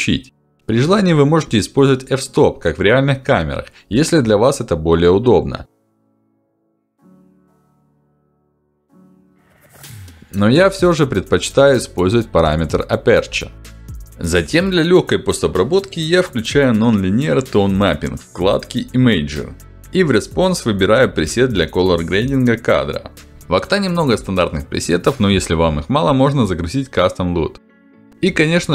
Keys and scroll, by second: 0.2 Return, 7.9 1, 8.3 6, 8.6 Return, 15.2 ctrl+alt+d, 21.4 ctrl+alt+d.